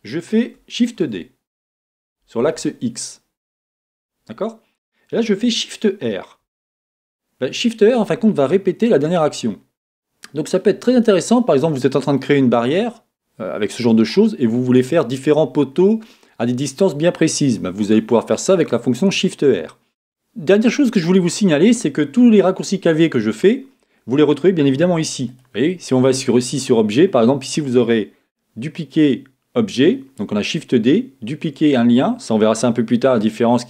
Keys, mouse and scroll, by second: 4.0-6.4 drag, 6.4 shift+r, 10.6-14.6 middle drag, 20.0-33.6 drag.